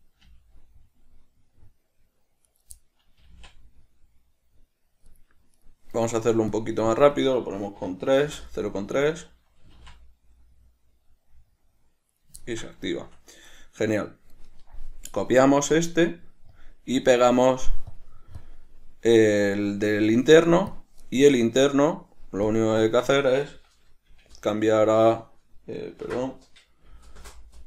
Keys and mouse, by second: 0.5 g, 2.8 right click, 3.0-5.4 middle drag, 3.5 g, 5.8 right click, 6.8-9.1 drag, 8.5 Return, 9.1 right click, 9.9 g, 12.4 right click, 12.7-13.7 ctrl+middle drag, 13.7 right click, 15.8-18.6 right drag, 18.6 click, 21.0 click, 22.8-27.6 drag.